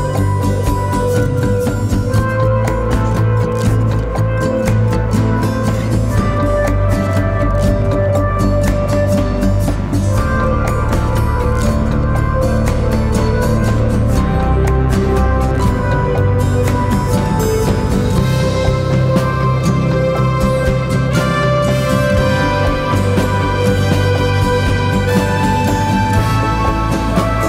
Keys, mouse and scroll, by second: 2.5 scroll up 1, 2.6-3.6 typing, 2.9 click, 3.4 click, 3.8-8.1 drag, 13.2 scroll up 1, 13.6 z, 13.8 click, 14.0 space, 14.1 click, 14.3 z, 15.1 click, 17.1 scroll down 1, 17.3 z, 17.5 click, 17.7 space, 17.8 click, 18.0 z, 18.2 click, 18.4 space, 23.5 space, 23.6 click, 24.0 space, 25.1 right click, 25.8 click.